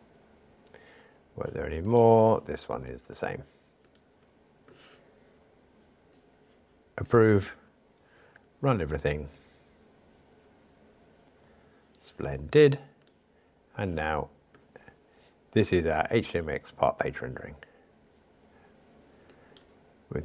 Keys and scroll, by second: 7.4 super+F11, 8.3 ctrl+r.